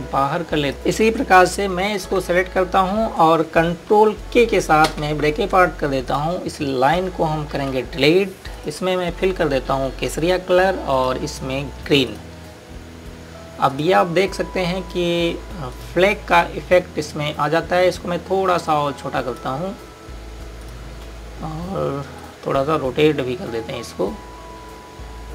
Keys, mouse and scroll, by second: 0.9 click, 3.1 z, 5.9 ctrl+k, 7.1 click, 8.6 Delete, 9.5 click, 14.2 scroll down 1, 14.7 click, 15.5-16.6 scroll up 1, 16.6 click, 19.7 click.